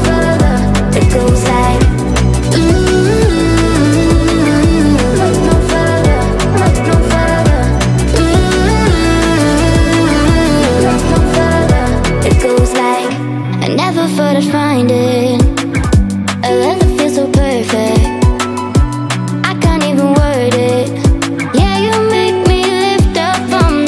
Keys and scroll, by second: 1.8 Delete, 6.9 space, 23.6-23.8 typing.